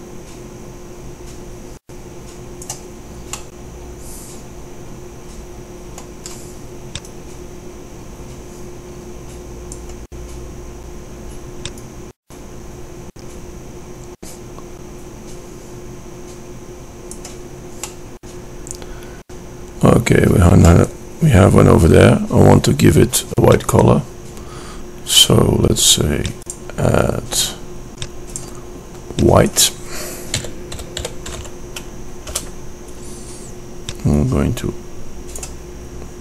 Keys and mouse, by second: 3.9-5.0 middle drag, 7.4-9.6 drag, 11.9-13.7 drag, 18.5-19.9 middle drag, 26.6-28.7 drag, 31.3-34.3 middle drag, 34.3-35.9 drag.